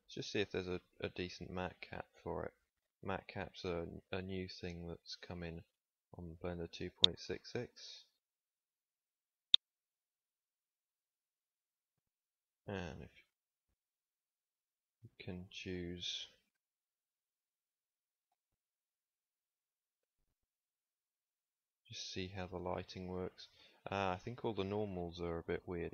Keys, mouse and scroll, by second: 4.2 middle click, 5.1-7.5 middle drag, 9.1-9.8 middle drag, 11.4 a, 11.6 a, 23.4 Tab.